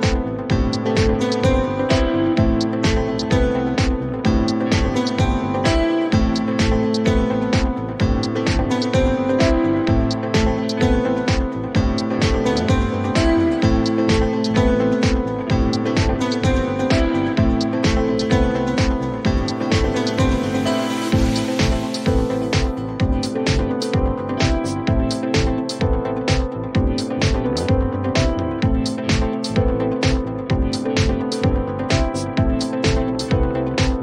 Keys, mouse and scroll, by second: 0.2 click, 1.0 click, 2.5-3.4 scroll, 3.6 click, 5.7 click, 8.1 click, 9.1-10.6 typing, 12.4 click, 14.4 click, 17.2 click, 18.4 click, 21.2 click, 22.4 click, 26.2 click, 28.6 click, 29.8 ctrl+d, 32.5 p.